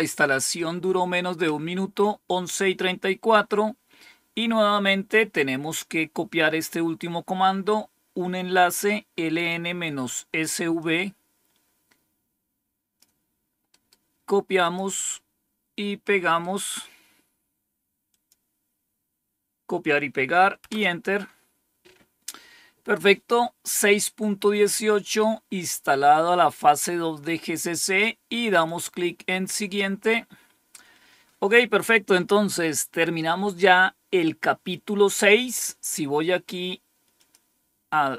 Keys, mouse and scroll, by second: 10.7-12.9 drag, 13.6 right click, 14.5 click, 16.3 right click, 18.0 click, 20.6 Return, 28.4 click, 37.1 click.